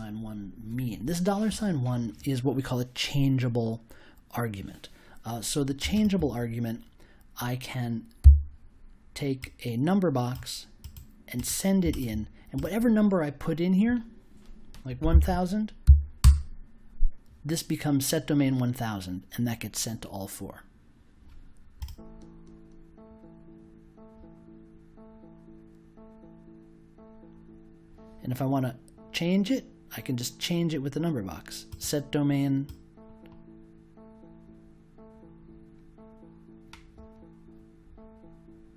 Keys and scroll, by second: 8.2 i, 14.7-15.6 typing, 16.2 Return.